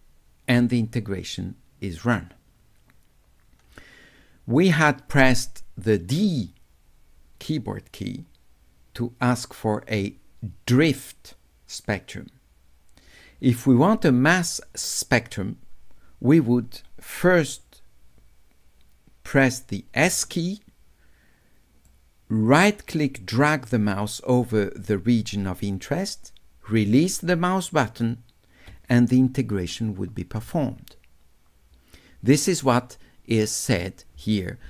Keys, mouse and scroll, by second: 20.1 s, 21.9 right click, 22.8-26.9 drag, 26.9-28.1 right drag, 33.4-34.6 drag.